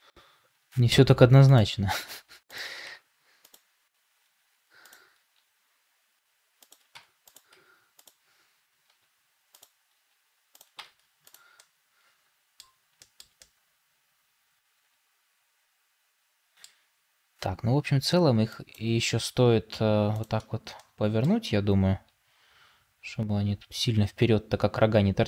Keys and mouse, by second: 0.5 r, 2.0 Tab, 2.7 Tab, 4.1 r, 5.1 g, 6.8 Tab, 7.4 Tab, 8.8 r, 9.8 g, 10.7 Tab, 11.5-12.5 middle drag, 12.9 shift+middle drag, 13.3-16.5 middle drag, 18.4-20.7 drag, 20.7 middle click, 21.8 r.